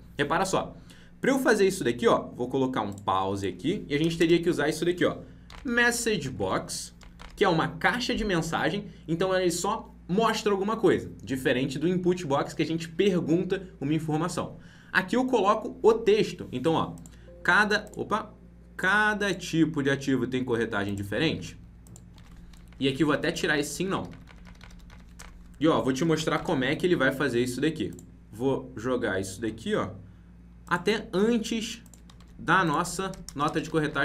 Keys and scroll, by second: 21.3 ctrl+c, 22.1 ctrl+v, 22.6 ctrl+Left, 32.1 ctrl+x, 33.8 ctrl+v.